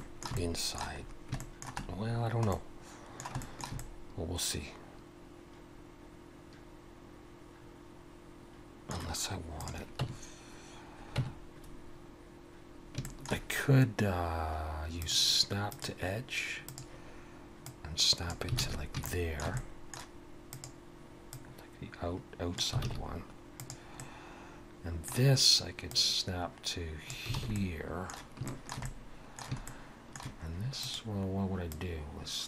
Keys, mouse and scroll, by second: 0.0 shift+middle click, 0.4 middle click, 1.3 scroll up 1, 1.4 shift+middle click, 2.0 scroll down 3, 2.5 middle click, 3.4 shift+middle click, 3.8 middle click, 9.6 click, 10.0 Tab, 11.2 Tab, 13.0 shift+middle click, 15.0 click, 18.6 alt+a, 19.1 shift+middle click, 19.5 middle click, 20.5 click, 21.3 click, 22.8 alt+a, 23.6 click, 24.0 middle click, 25.9 click, 27.4 alt+a, 27.5 middle click, 28.5 shift+middle click, 28.8 middle click, 29.7 shift+middle click, 30.8 click, 31.7 click.